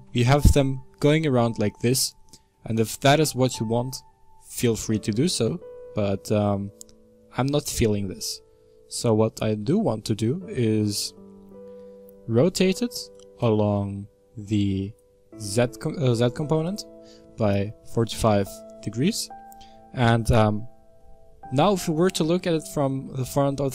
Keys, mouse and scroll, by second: 0.5-0.9 scroll down 1, 0.9-4.1 middle drag, 4.1-4.7 scroll down 1, 4.7-5.7 middle drag, 5.7-6.5 scroll up 3, 6.5-8.8 middle drag, 8.8-9.5 scroll down 1, 9.5-13.5 middle drag, 13.5-19.1 drag, 19.1-21.9 middle drag, 21.9 KP_1, 22.4-23.4 scroll down 4, 23.4-23.7 shift+middle drag.